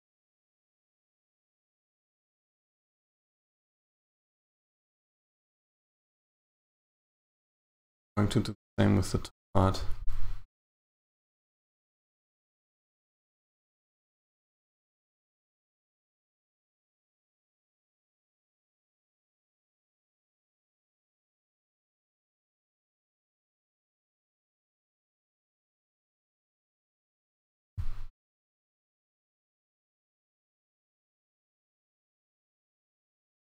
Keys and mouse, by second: 1.0 ctrl+right click, 3.1 shift+right click, 3.9 shift+right click, 5.2 g, 7.3 Tab, 9.3 right click, 9.7 Tab, 12.6 right click, 13.5 g, 15.2 g, 17.1 g, 21.3 right click, 22.0 g, 25.1 right click, 25.6 g, 32.4 right click, 33.2 g.